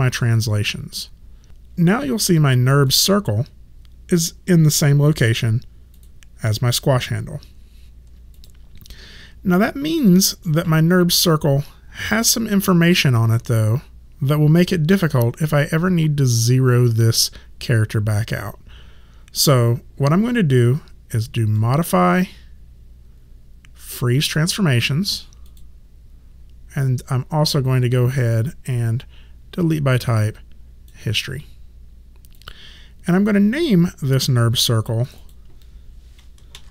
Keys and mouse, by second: 1.5 click, 6.0 click, 8.3 click, 21.6 click, 25.5 click, 28.0 click, 32.3 click, 36.3-36.7 typing.